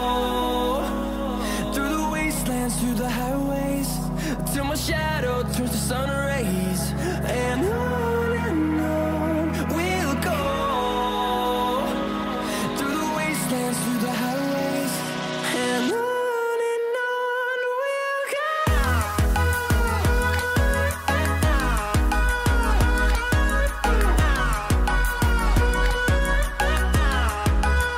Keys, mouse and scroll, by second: 4.5-6.0 scroll up 1, 6.0 right click, 6.5 click, 6.6 click, 16.9 click, 17.5-19.1 scroll up 1, 19.1-27.9 drag, 21.2 typing.